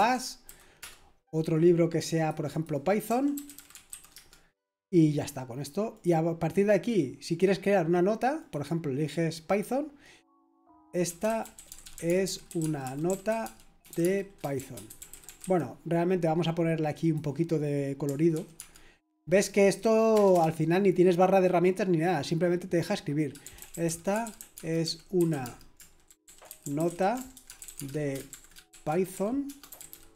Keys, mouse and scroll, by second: 0.0-0.9 typing, 2.1 click, 2.8-4.4 typing, 5.6-6.5 typing, 5.9 click, 7.3 click, 8.4 click, 9.4 click, 10.8-15.9 typing, 17.0 click, 18.3 typing, 19.6 click, 20.3 typing, 23.2-30.1 typing.